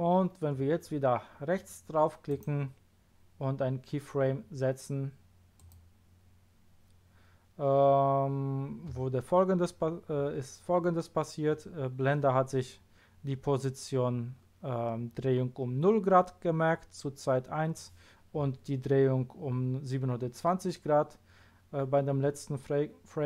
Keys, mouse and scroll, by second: 2.2 right click, 5.6 click.